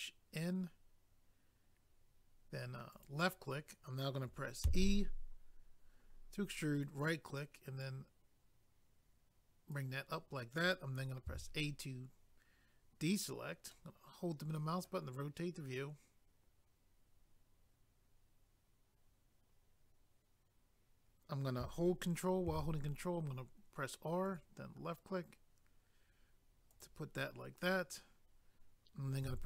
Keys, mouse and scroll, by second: 2.9 click, 6.7 right click, 7.8 click, 11.2 a, 13.7 middle click, 22.5 ctrl+r, 24.3 click, 26.7 click, 29.2 a.